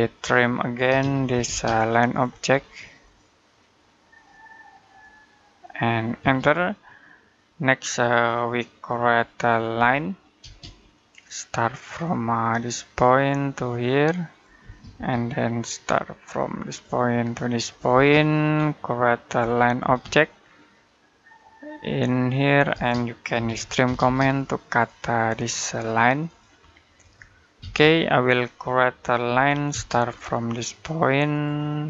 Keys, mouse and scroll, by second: 0.7-1.1 typing, 2.3-2.9 scroll up 1, 2.9 click, 6.0 space, 6.4-6.9 scroll down 1, 6.9 middle click, 9.6 l, 10.2 space, 13.0 click, 14.4 space, 16.5 click, 17.7 space, 18.4-19.2 scroll up 1, 19.2 l, 19.7 space, 21.5 click, 22.5-23.7 typing, 24.1 click, 27.4 space, 27.8-28.2 scroll down 1, 28.2 middle click, 29.1 l, 29.5 space, 29.8-31.1 scroll up 1, 31.1 click.